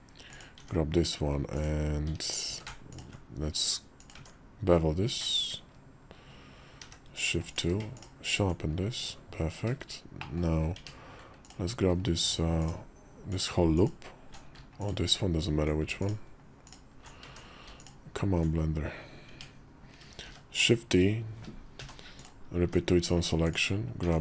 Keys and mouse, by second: 0.3 Tab, 1.3 click, 2.2 q, 3.9 Tab, 6.6 shift+2, 7.2 click, 7.4 q, 10.0 click, 10.5 Tab, 11.2 alt+click, 12.4 alt+click, 13.5 alt+click, 14.6 alt+click, 15.8 alt+click, 17.0 Tab, 17.5 alt+click, 19.1 Tab, 20.0 shift+d, 21.5 p, 22.4 Tab, 23.2 click, 23.8 Tab.